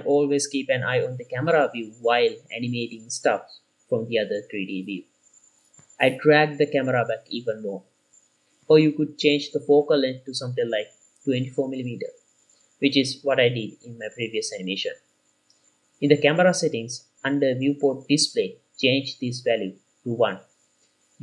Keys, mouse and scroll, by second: 0.0-0.8 ctrl+middle drag, 1.1 click, 1.8 shift+middle click, 2.4 click, 2.7 shift+middle click, 4.3 click, 5.6 shift+middle click, 6.1 g, 6.4 y, 9.5 click, 10.0-10.7 scroll down 2, 10.7-11.2 shift+middle drag, 11.9-12.6 middle drag, 13.3 KP_7, 14.6 g, 14.9 y, 16.6 click, 19.0 click.